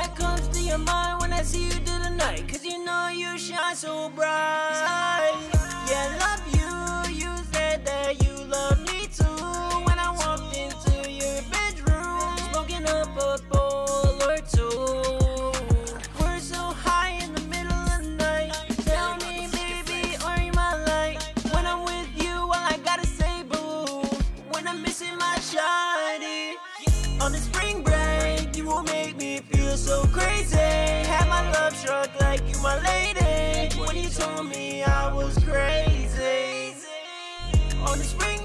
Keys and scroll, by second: 11.6 ctrl+super+w, 11.8 super+s, 25.2-26.0 typing, 27.1-28.6 typing, 37.4-38.2 typing.